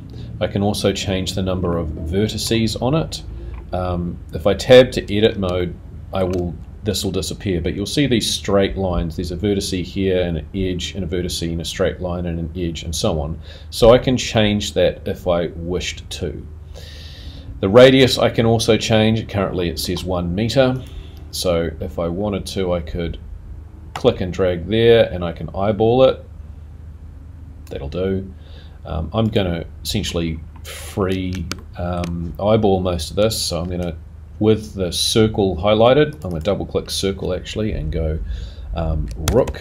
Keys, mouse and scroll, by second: 1.7 middle click, 2.9-4.8 scroll up 6, 5.0-5.5 scroll up 4, 5.6 shift+middle click, 6.2 shift+scroll down 1, 19.2-19.6 scroll down 7, 20.7 click, 21.8-22.6 scroll down 3, 22.6 scroll down 1, 23.9 click, 29.2 click, 30.1-30.7 scroll up 5, 30.7 scroll down 4, 31.5 shift+middle click, 38.9 click.